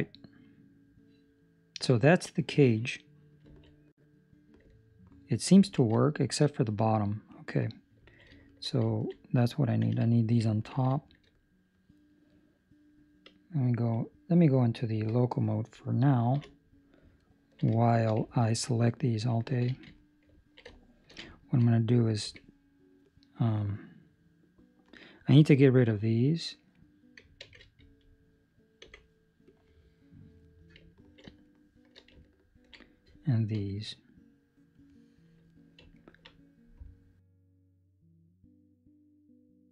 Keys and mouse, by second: 3.5 ctrl+middle click, 3.7 middle click, 4.6 ctrl+middle click, 5.9 shift+middle click, 7.2 right click, 8.0 ctrl+middle click, 8.2 shift+middle click, 8.8 ctrl+middle click, 9.8 Tab, 10.4 ctrl+middle click, 10.9 shift+middle click, 11.2 middle click, 14.9 KP_Divide, 16.3 KP_1, 17.1 ctrl+middle click, 17.7 shift+middle click, 18.2 ctrl+middle click, 19.6 alt+a, 20.3 ctrl+middle click, 20.6 shift+middle click, 21.2 ctrl+middle click, 22.2 c, 27.4 alt+a, 27.7 Escape, 28.8 c, 30.8 ctrl+middle click, 31.4 shift+middle click, 32.2 ctrl+middle click, 33.5 c, 35.9 ctrl+middle click, 38.7 ctrl+middle click, 39.1 shift+middle click.